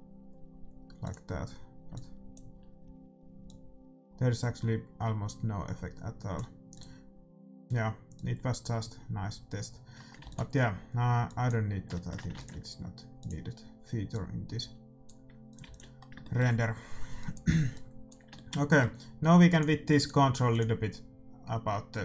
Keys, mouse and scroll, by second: 1.0-2.9 drag, 3.4-5.3 drag, 6.7-8.7 drag, 10.2 ctrl+s, 11.2-15.1 drag, 11.9-14.8 middle drag, 12.3 ctrl+s, 15.4-22.0 drag, 15.6 ctrl+s, 17.1 middle click, 18.3-20.4 middle drag.